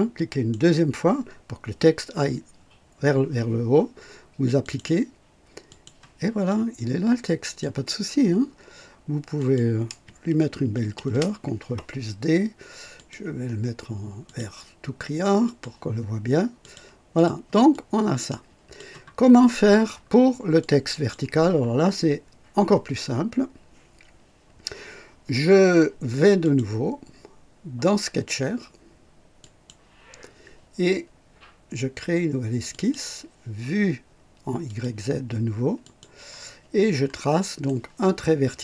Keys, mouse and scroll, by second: 0.2 click, 4.6 click, 5.6 click, 6.4-7.7 drag, 9.3 click, 10.9 ctrl+d, 12.9 click, 14.2 click, 15.4 click, 16.6 click, 17.1 click, 17.7-18.9 drag, 19.3 scroll up 1, 19.8 scroll down 1, 20.5-21.2 drag, 26.4 click, 29.3 click, 32.7 click, 34.6 click, 35.8 click, 36.8 scroll up 2, 37.2 right click.